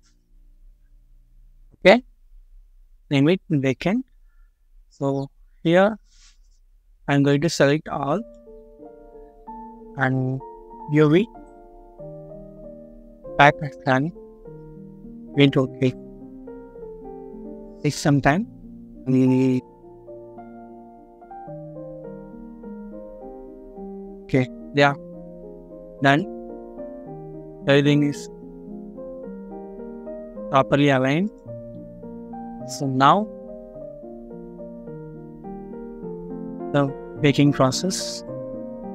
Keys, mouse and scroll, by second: 0.5 Return, 4.8 scroll down 1, 24.7-25.0 scroll up 1, 27.3 scroll up 1, 28.3 scroll down 1, 31.9 middle click, 33.3 scroll down 1.